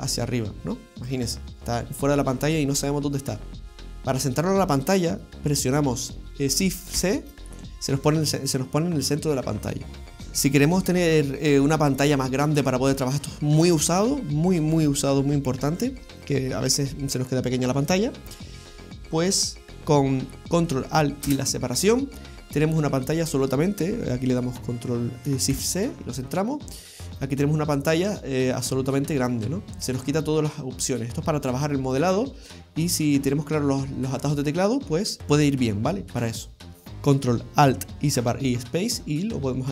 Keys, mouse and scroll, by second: 0.0 click, 0.0 scroll down 6, 3.8 alt+c, 7.0 shift+c, 19.8-20.1 scroll up 10, 21.3 ctrl+alt+space, 22.5-24.4 scroll down 5, 24.4-25.1 scroll down 1, 25.6 shift+c, 26.6-27.3 scroll up 8, 27.5 shift+middle click, 28.2-30.3 scroll up 4, 32.2 middle click, 35.2 scroll down 7, 35.3-36.0 scroll up 3, 36.0-36.6 scroll down 3, 36.6 ctrl+alt+space.